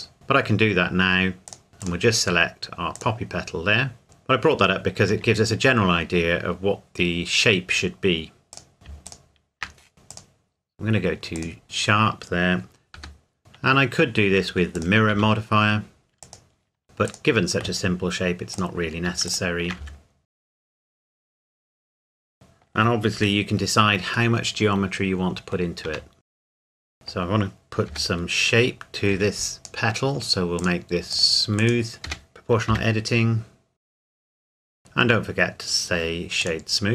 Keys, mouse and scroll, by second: 1.5 click, 4.0-5.1 scroll down 1, 5.1 Tab, 6.9-8.5 scroll up 1, 8.5 click, 9.1 shift+click, 9.9 o, 10.1 click, 12.9 g, 14.7 click, 15.1 s, 16.2 click, 16.8 scroll down 1, 17.1 click, 19.3 shift+click, 19.8 s, 20.3 click, 20.5 alt+click, 20.9 g, 21.1-21.5 scroll up 1, 21.5 click, 21.9 Tab, 22.2 middle click, 23.2 KP_Decimal, 24.3 middle click, 25.9 Tab, 26.3 right click, 26.5 click, 26.5 g, 26.6 scroll up 1, 26.7 right click, 26.9 middle click, 27.9 g, 29.1 Escape, 29.6 click, 32.1 g, 32.7 z, 33.4-33.7 scroll down 1, 33.7 click, 33.9 alt+shift+click, 34.0 x, 34.1 g, 34.2 middle click, 34.5 g, 34.7 Tab, 34.7 middle click, 36.4 click.